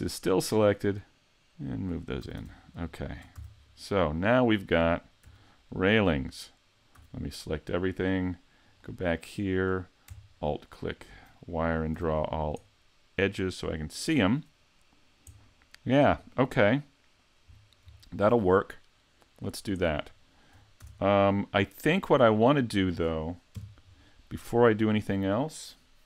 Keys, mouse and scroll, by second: 0.5 click, 2.2 a, 2.4 Tab, 2.5 scroll down 3, 3.0 shift+middle click, 3.3 a, 3.6-4.2 scroll down 2, 4.0 middle click, 5.2 z, 5.6 middle click, 6.9 a, 8.6 click, 10.5 alt+click, 10.9 alt+click, 11.9 a, 12.2-12.7 scroll down 2, 12.6 middle click, 14.2 scroll up 6, 15.3 middle click, 17.5 scroll down 5, 18.0 shift+middle click, 18.6 middle click, 19.4-19.8 scroll up 3, 19.8 shift+middle click, 20.8 shift+c, 21.8-22.8 scroll up 12, 23.5 KP_5, 24.6 shift+middle click.